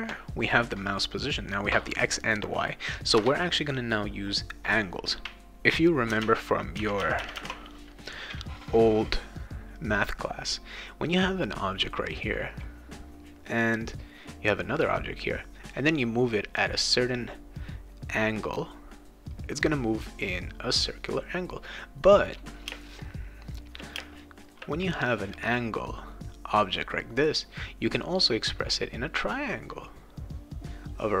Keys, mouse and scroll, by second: 3.1 Return, 6.2 alt+Tab, 6.8 alt+Tab, 7.0 alt+Tab, 11.1 click, 13.2 click, 13.9 click, 15.7 click, 16.5 click, 17.2 click, 17.9 click, 18.3 click, 18.6 click, 19.5 click, 20.7 click, 22.7 space, 23.0 click, 24.0 space, 24.1 click, 25.1 click, 25.9 click, 26.7 click, 27.6 click, 27.9 click, 28.4 click, 29.0 click, 29.4 click, 29.6 click, 30.1 click, 31.0 click.